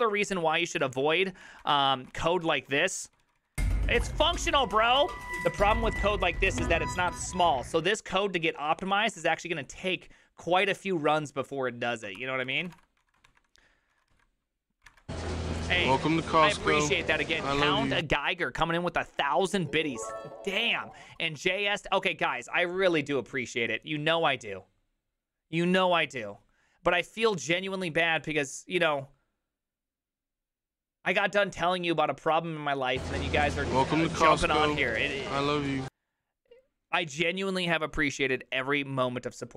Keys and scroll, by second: 0.7 alt+[, 0.9 alt+{, 1.5 ctrl+a, 1.8 1, 2.1 ctrl+u, 2.3 ctrl+u, 2.6 ctrl+u, 3.6 ctrl+u, 4.1 ctrl+d, 4.1-5.3 typing, 8.5-10.7 typing, 12.2 ctrl+c, 12.4-14.6 typing, 13.3 ctrl+a.